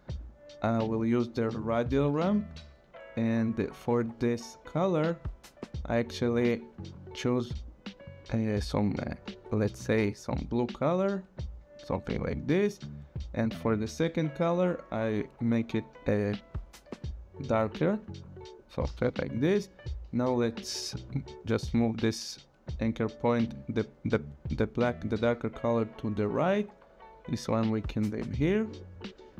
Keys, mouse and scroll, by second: 0.2 click, 4.7 click, 7.7 click, 10.1 click, 12.3 click, 13.7 click, 16.0 click, 17.2 click, 18.8 Return, 20.6 click, 27.3 click.